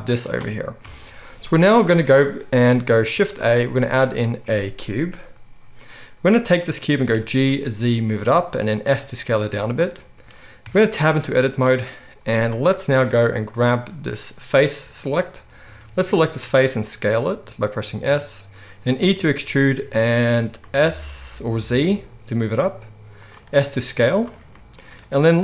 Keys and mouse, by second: 0.8 KP_1, 3.2 shift+a, 7.1 g, 8.7 s, 10.6 Tab, 13.6-15.1 drag, 15.1-25.4 middle drag, 15.7 s, 19.0 e, 23.4 s.